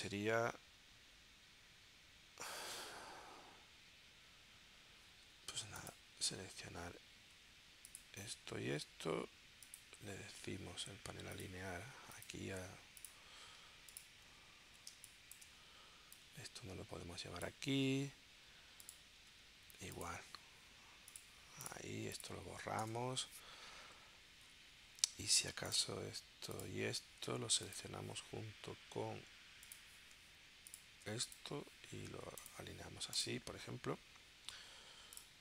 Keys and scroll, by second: 14.9 space, 22.8 BackSpace.